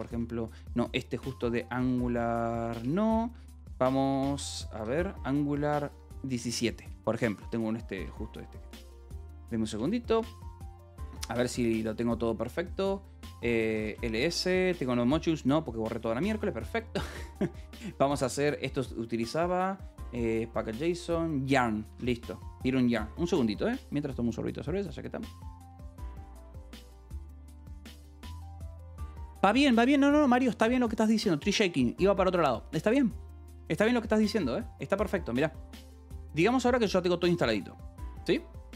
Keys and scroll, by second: 0.0-0.3 typing, 1.1 Tab, 1.7 Return, 2.7 BackSpace, 4.3 n, 5.5 Tab, 6.4 Return, 7.0-10.0 typing, 10.5 Escape, 11.1 w, 13.6 l, 14.8 Return, 22.0-23.0 typing, 36.8-38.7 typing.